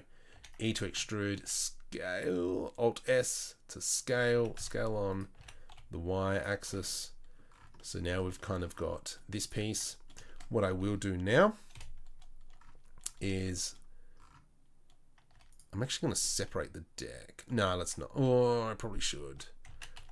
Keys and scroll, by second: 0.4 e, 1.4 alt+s, 4.3 s, 5.4 s, 6.7 Tab, 11.8 KP_7, 15.3 Tab, 16.4 Tab, 17.8 Tab, 18.2 Tab, 20.0 2.